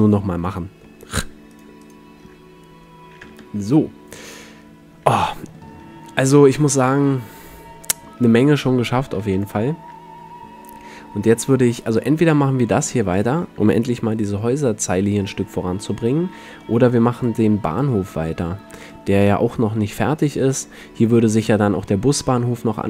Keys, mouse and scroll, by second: 1.6-3.8 drag, 3.4 Tab, 4.8-6.5 middle drag, 5.4 a, 6.9 middle click, 8.3 middle click, 8.8 middle click, 9.4 ctrl+s, 12.6-13.3 drag, 13.3 middle click, 13.9 click, 14.0 KP_Decimal, 14.0-15.7 middle drag, 17.5 click, 19.0-22.8 middle drag.